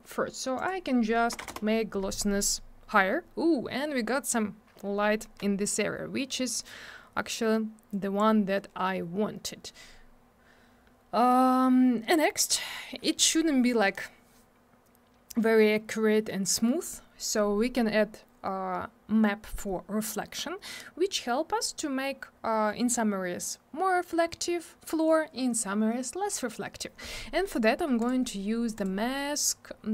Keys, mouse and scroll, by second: 0.6 click, 0.6 click, 1.3 BackSpace, 1.4 8, 1.5 Return, 7.9 click, 27.5 click, 28.0 click, 28.8 click.